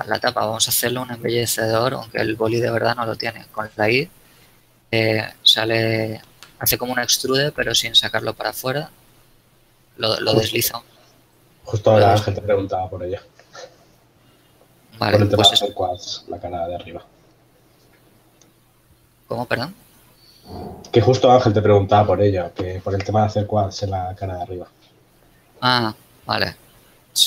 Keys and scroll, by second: 4.2 i, 23.2 KP_Decimal.